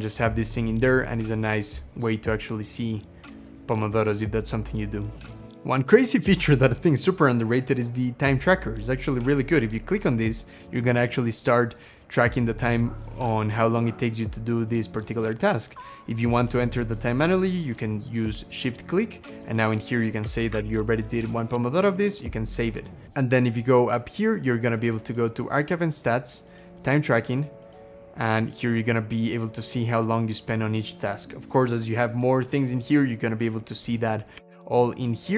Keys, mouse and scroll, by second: 16.7 shift+click, 20.1 2, 20.4 5, 20.5 Return, 27.9 scroll down 2, 28.7-29.2 scroll down 3, 34.3 Escape, 35.0 scroll down 2.